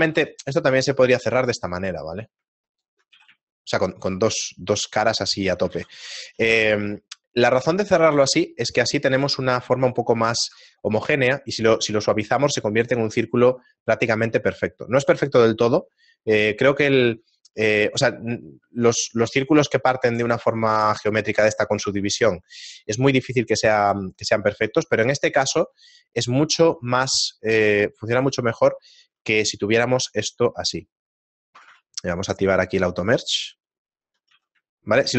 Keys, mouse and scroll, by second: 0.2 ctrl+Tab, 1.9 right click, 3.1 a, 3.4 shift+middle click, 6.4 ctrl+z, 6.8 shift+middle click, 10.5 ctrl+2, 10.5 Tab, 10.5 a, 12.4 shift+middle click, 13.5 shift+middle click, 15.2 Tab, 16.5 middle click, 18.4 middle click, 23.7 shift+middle click, 27.6 right click, 29.0 a, 31.4 right click, 32.3 click, 33.0 right click, 34.4 a, 34.8 shift+middle click.